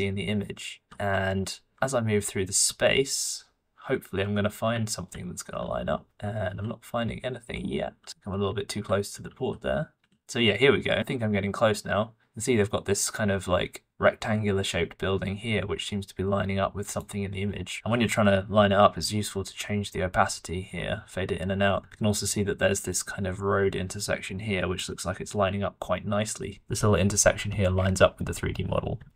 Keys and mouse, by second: 4.5-7.5 middle drag, 16.9 middle click, 17.4 middle click, 19.1-22.9 middle drag, 24.8-26.5 middle drag, 26.5 click, 26.5-27.3 d, 27.7 d.